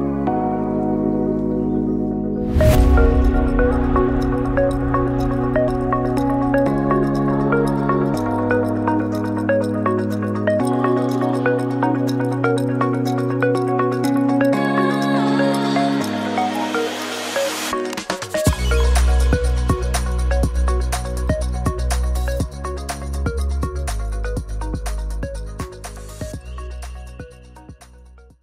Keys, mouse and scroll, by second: 10.0 middle click, 14.6 click, 15.1 shift+middle click, 15.8 KP_0, 19.7-20.3 scroll down 13, 20.8 click, 20.8 scroll down 3, 22.1 click, 23.0 click.